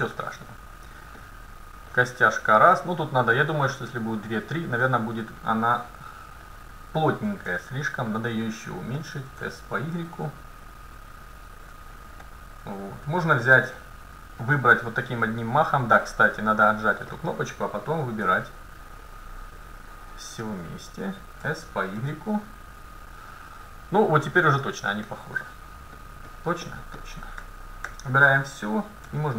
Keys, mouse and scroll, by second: 0.0-0.5 scroll up 1, 1.0-2.0 scroll down 1, 3.8 scroll up 1, 4.9-6.9 middle drag, 7.5 s, 9.4 s, 12.3 middle click, 13.3 a, 13.7 c, 17.1-20.0 drag, 18.3 c, 21.5 s, 25.1 middle click, 26.4-27.6 middle drag, 27.4 a, 27.9 a, 29.1 s.